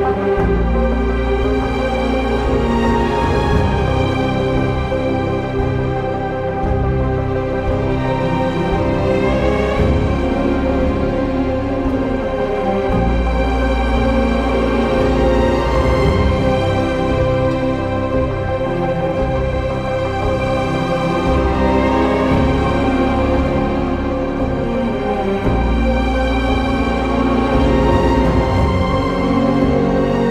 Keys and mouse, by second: 1.1 q, 1.9 click, 2.9 q, 4.8 shift+click, 7.4 q, 9.6 shift+click, 9.9 q, 10.6 click, 10.9 ctrl+x, 11.6 2, 12.3 ctrl+x, 13.6 ctrl+x, 18.6 Tab, 19.2 Tab, 19.7 1, 20.3 2, 20.5 click, 21.2 shift+click, 24.0 2, 27.4 shift+click, 29.0 shift+click.